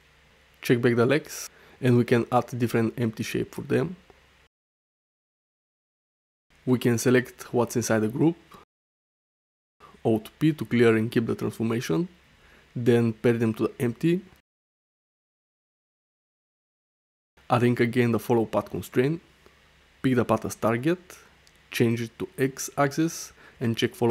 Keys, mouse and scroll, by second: 2.6-3.0 drag, 2.6-3.0 right drag, 3.8 shift+a, 5.1 click, 6.3 click, 7.6-8.8 drag, 9.8 alt+p, 11.9 shift+click, 12.8 ctrl+p, 14.3 click, 15.3 m, 18.1-19.6 drag, 20.3 click, 22.7 click, 23.7 click.